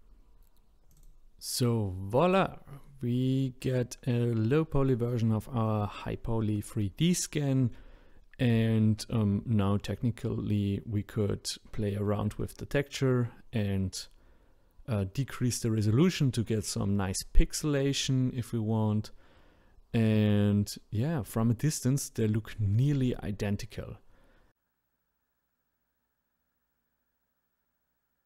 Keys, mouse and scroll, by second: 0.3-3.1 drag, 3.1 middle drag, 4.2-6.9 middle drag, 6.9-7.8 scroll down 2, 7.8-8.3 shift+middle drag, 8.3-9.0 scroll up 1, 9.0-14.1 shift+middle drag, 14.1-14.7 scroll up 1, 14.7-15.3 scroll up 1, 15.3-15.7 scroll down 2, 15.7-17.9 middle drag, 17.9 scroll up 2, 19.3 middle click, 20.1-20.9 scroll down 1, 20.9-22.0 shift+middle drag, 22.0-22.4 scroll down 2, 22.4-28.2 middle drag.